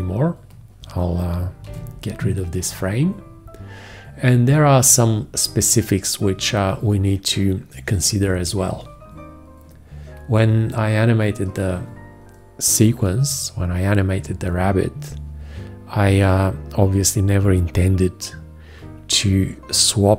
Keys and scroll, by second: 1.9 shift+x.